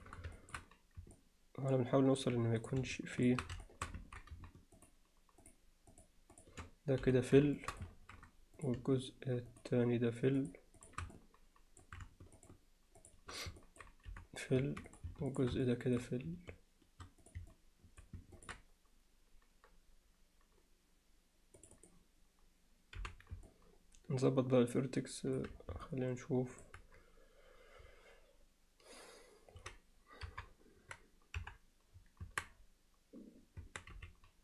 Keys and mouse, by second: 0.4 alt+shift+middle click, 1.1-2.2 alt+middle drag, 2.6 click, 3.2 shift+click, 3.7 alt+shift+middle click, 4.8 shift+click, 7.6 alt+shift+middle click, 8.6 click, 9.5 shift+click, 10.4 shift+click, 11.2 alt+middle click, 12.4 shift+click, 13.6 alt+middle click, 14.9 click, 15.3 click, 15.6 alt+middle click, 17.5 alt+middle click, 18.4 ctrl+alt+middle click, 21.6 click, 23.5-25.4 middle drag, 25.9 alt+middle click, 30.3 KP_3, 31.4 KP_1, 32.3 Tab, 33.6 Tab, 33.9 z.